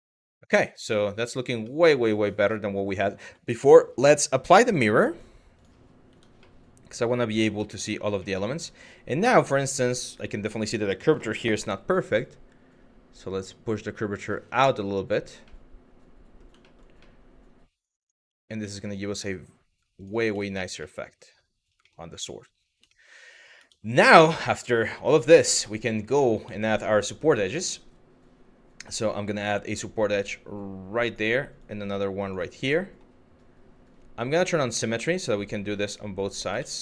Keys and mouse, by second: 0.2 shift+middle drag, 0.9 Tab, 1.3 middle click, 2.2 middle click, 3.1 Tab, 4.7-5.3 drag, 6.1-7.1 middle drag, 7.4 middle click, 7.9 middle click, 8.6 click, 9.0 click, 9.4 click, 10.9 s, 11.5 y, 14.3 click, 15.2 middle click, 16.3 shift+middle click, 16.6 middle click, 17.6 click, 17.9 Tab, 18.3 middle drag, 19.6 click, 20.1 shift+middle drag, 20.5 middle drag, 21.5 middle click, 21.9 middle click, 22.6 shift+middle click, 23.2 Tab, 23.7 middle click, 24.1 middle click, 24.8 middle click, 25.9 middle click, 26.2 middle click, 29.4 click, 31.2 click, 32.3 middle click, 35.4 click, 36.2 ctrl+z, 36.6 middle click.